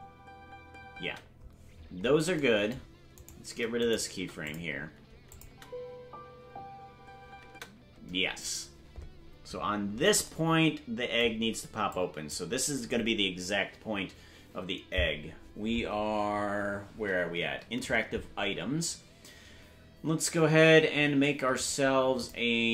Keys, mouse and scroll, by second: 1.7-3.1 scroll down 9, 3.1 right click, 4.1 Delete, 5.3 click, 5.4 space, 8.1-9.3 scroll up 3, 8.1 space, 10.2 scroll up 7, 11.9 click, 16.3-16.7 scroll down 9, 21.5-22.7 right drag, 21.5-22.6 scroll down 2.